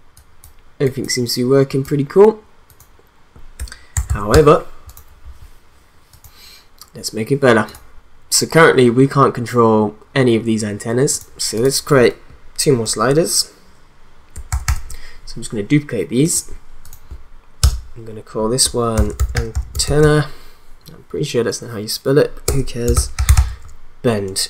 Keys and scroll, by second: 3.5 1, 3.9 0, 4.3 Return, 14.5 ctrl+d, 17.6 Return, 18.7-20.5 typing, 22.5-23.8 typing.